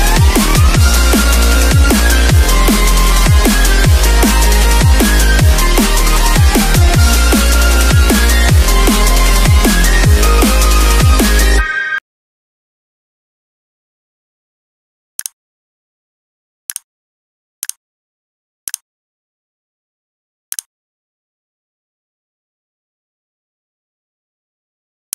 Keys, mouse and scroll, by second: 0.8 click.